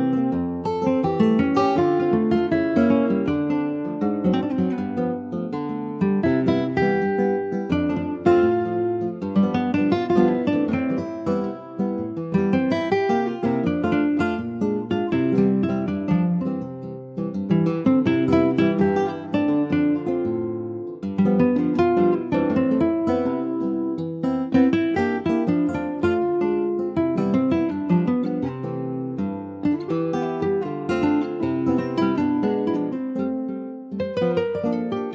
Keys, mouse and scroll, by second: 0.5 alt+middle click, 1.5 middle click, 1.9 alt+z, 2.0-3.0 scroll down 3, 3.0 ctrl+s, 3.1 click, 3.5 middle click, 4.0 ctrl+s, 4.1 click, 5.0 p, 5.7 click, 6.0 Tab, 6.7 p, 7.9 Tab, 8.1 click, 8.5 click, 9.5 a, 10.6 ctrl+s, 10.8 ctrl+a, 12.9-14.7 right drag, 14.7 click, 15.1 ctrl+s, 15.2 click, 15.5-18.2 middle drag, 18.2 ctrl+scroll up 1, 18.3 ctrl+s, 18.9 /, 19.5 click, 19.9 middle click, 20.3-20.6 scroll down 2, 20.6-22.1 shift+middle drag, 22.1-22.5 scroll up 2, 22.5 ctrl+s, 22.7 middle click, 23.3 ctrl+s, 23.4 click, 24.1 shift+click, 24.8 shift+click, 25.4 shift+click, 26.6 /, 27.0 click, 27.8 ctrl+s, 28.0 click, 28.3 shift+scroll up 3, 28.5 shift+middle click, 29.1 middle click, 29.5 ctrl+s, 29.7 middle click, 29.9-30.7 scroll up 2, 30.1 shift+middle click, 30.7-31.9 middle drag, 31.9-33.7 drag, 33.7 middle click, 34.1 Tab, 34.4 middle click, 34.7-35.0 scroll up 1, 35.0 click.